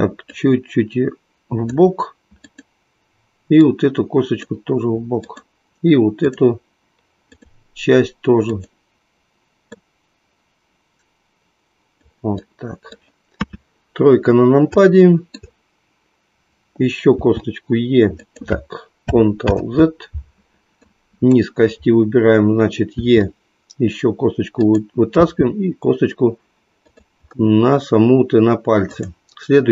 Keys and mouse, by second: 0.7-1.7 drag, 2.5 click, 3.6 click, 5.1 click, 8.5 click, 9.7-12.0 drag, 12.4-13.6 middle drag, 13.6 KP_3, 14.8 shift+middle click, 17.1 e, 20.4 ctrl+z, 20.7 click, 23.0 e, 25.4 e, 26.8 click, 28.8 click.